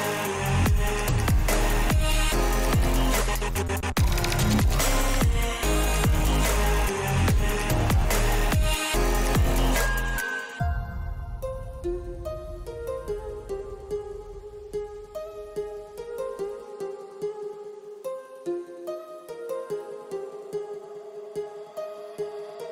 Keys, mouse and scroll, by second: 1.6 middle click, 2.4 click, 3.2 shift+middle click, 3.7 shift+middle click, 4.1 shift+middle click, 5.4 a, 6.8 y, 7.9 right click, 8.9 middle click, 9.4 middle click, 9.9 shift+middle click, 10.8 ctrl+z, 11.0 ctrl+z, 11.4 ctrl+z, 12.2 g, 13.3 e, 20.3 click, 22.1 g.